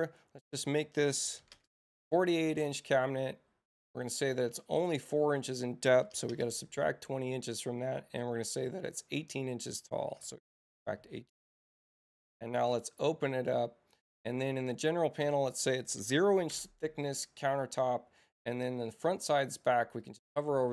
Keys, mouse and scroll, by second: 0.5 Return, 3.8 right click, 4.8 click, 5.3 Return, 7.8 middle click, 7.8 scroll up 1, 9.0 click, 9.5 Return, 15.3 click, 16.5 Tab, 18.9 click, 20.0 click.